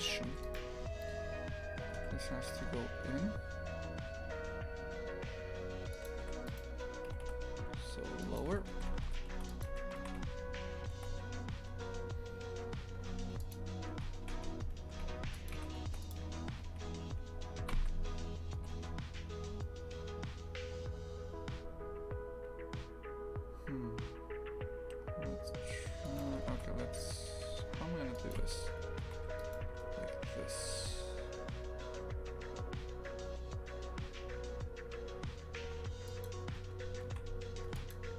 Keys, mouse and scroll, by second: 0.0 right click, 0.3 2, 0.4-1.8 right drag, 1.8 g, 6.2 3, 6.5 right click, 7.1 g, 8.5 Tab, 8.7 shift+f, 9.7 a, 10.0 shift+f, 13.9 Tab, 14.2 shift+f, 15.5 a, 15.8 ctrl+r, 18.6 g, 26.5 ctrl+r, 29.1 1, 29.4-30.7 right drag, 30.7 g, 37.1 shift+f.